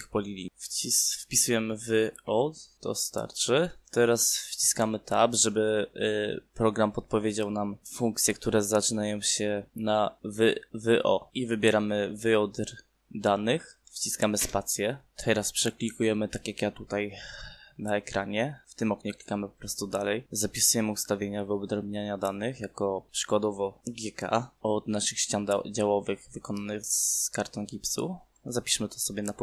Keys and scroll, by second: 0.8 o, 14.4 space, 25.9 g, 26.0 k.